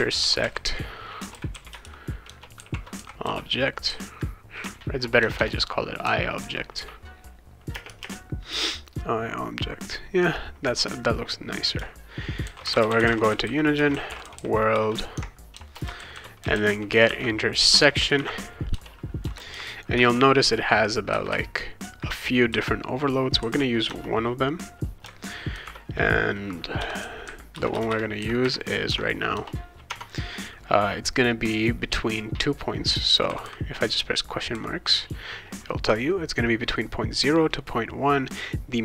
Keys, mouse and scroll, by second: 0.0-5.4 typing, 7.7 space, 7.9 =, 8.0 space, 12.2-20.0 typing, 15.1 Tab, 17.7 Return, 23.8 BackSpace, 25.5 shift+0, 26.8 ;, 27.5 Return, 27.8 Return, 28.8 Tab, 29.3 BackSpace, 29.9 Tab, 33.3 ,, 33.4 ,, 34.5 ,.